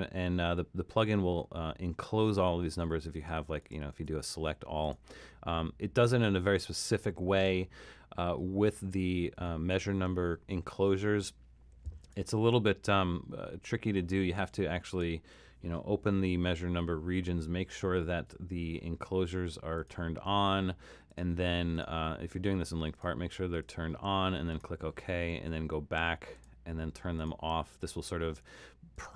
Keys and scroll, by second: 3.9 super+a.